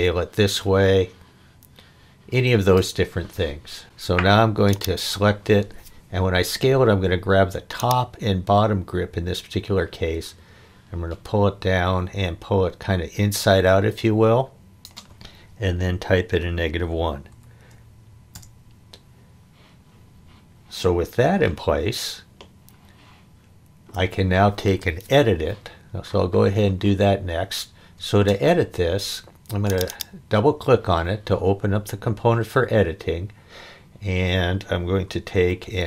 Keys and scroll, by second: 16.6 -, 17.3 1, 18.3 Return, 27.9 space, 35.3 e.